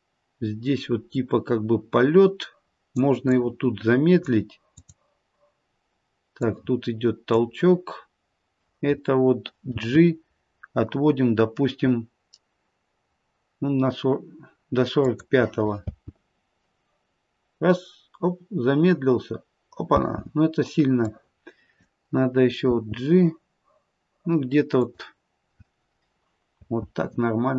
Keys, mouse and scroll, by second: 3.3 click, 4.7 click, 9.7 g, 15.8 space, 19.9 space, 21.0 click, 22.7 g, 26.6 space.